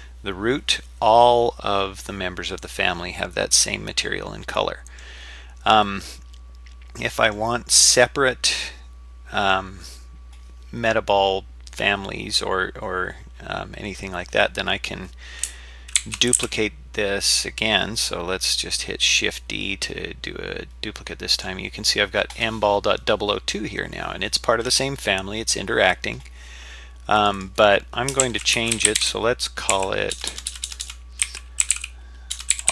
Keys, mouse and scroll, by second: 3.2-5.0 middle drag, 5.8-7.3 middle drag, 8.0-9.5 middle drag, 16.0 shift+d, 27.2 click, 27.4-32.7 drag, 30.3 BackSpace, 30.7 BackSpace, 30.8 BackSpace.